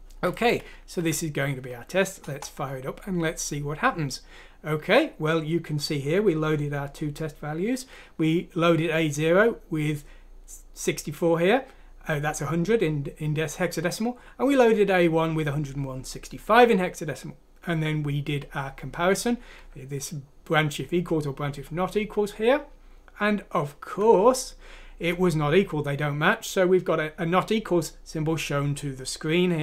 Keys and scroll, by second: 1.0 F6, 2.2 Return.